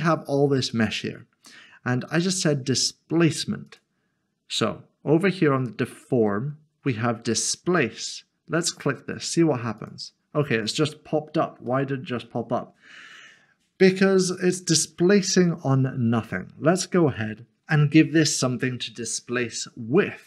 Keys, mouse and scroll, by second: 0.7 middle click, 3.7 click, 9.8 click, 11.7 click, 11.8 middle click.